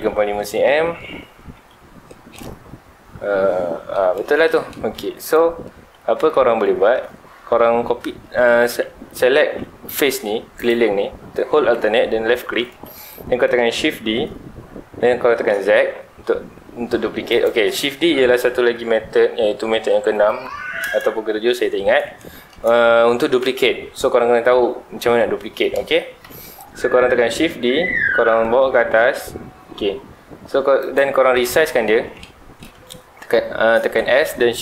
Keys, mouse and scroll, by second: 0.2 scroll down 1, 0.3-1.1 middle drag, 1.1 Tab, 1.6 middle click, 2.2 scroll up 2, 2.3-4.8 middle drag, 4.8 3, 5.2 alt+click, 6.0-7.1 middle drag, 7.1-8.2 scroll up 2, 8.2 middle click, 9.1 alt+a, 10.5 alt+click, 12.7-14.0 middle drag, 14.0 shift+d, 17.4 click, 22.1-25.3 shift+middle drag, 26.2 KP_7, 27.0 z, 27.6-28.7 middle drag, 28.7 g, 30.9 click, 31.3 KP_7, 32.0 scroll down 1, 32.1-33.8 middle drag, 33.8 s.